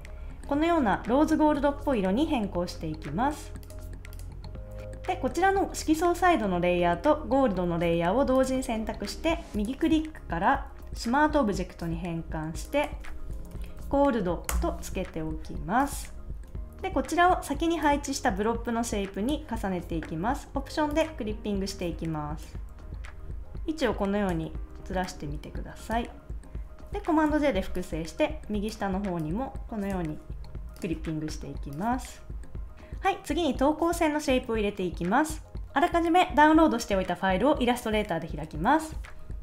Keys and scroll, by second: 13.0-14.3 typing, 14.5 Return, 16.2 super+s, 16.4 super+z, 27.2 super+j.